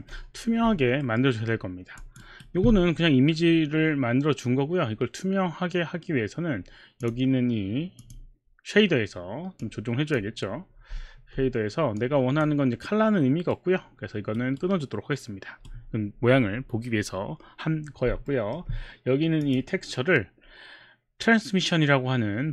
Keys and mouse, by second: 1.0 alt+middle click, 2.0 alt+click, 2.2 alt+click, 2.2 alt+right click, 7.1 click, 8.1 click, 9.6 click, 12.0 click, 13.5 right click, 14.6 right click, 18.3 alt+middle click, 19.4 click.